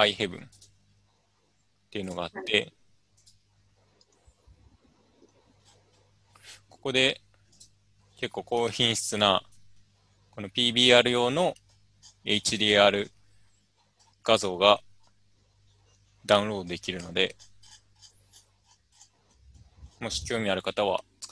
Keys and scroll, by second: 0.6 Return, 3.0 typing.